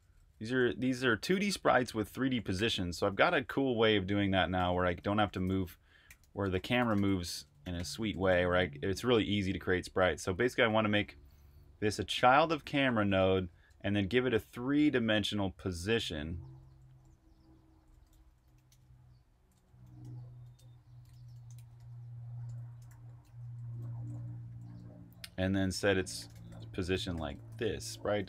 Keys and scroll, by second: 0.0-1.0 typing, 2.1-6.0 typing, 7.4-9.4 typing, 10.6-11.3 typing, 12.4-14.0 typing, 16.4-18.1 typing, 20.8-28.2 typing.